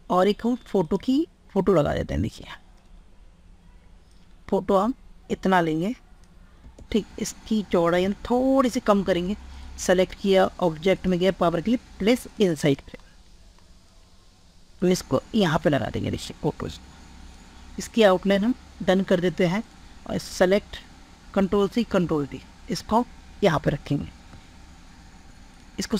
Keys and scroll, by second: 21.1 ctrl+c, 21.8 ctrl+v, 23.0 ctrl+v.